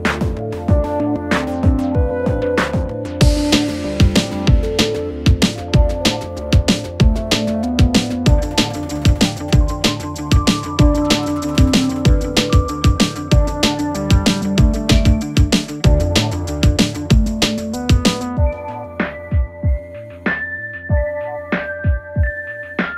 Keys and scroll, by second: 1.3 Escape, 8.7 ], 9.3 ctrl+z, 12.8 4, 15.8 3, 20.3 ctrl+z, 20.8 ].